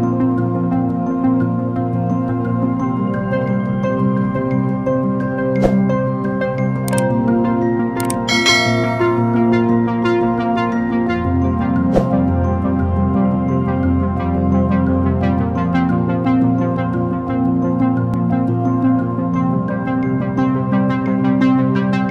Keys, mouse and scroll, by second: 2.8 alt+shift+click, 5.0 alt+click, 10.4 ctrl+=, 11.8 ctrl+-, 12.2 ctrl+-, 15.4 ctrl+=, 16.2 ctrl+=, 16.6 ctrl+=, 22.0 ctrl+-.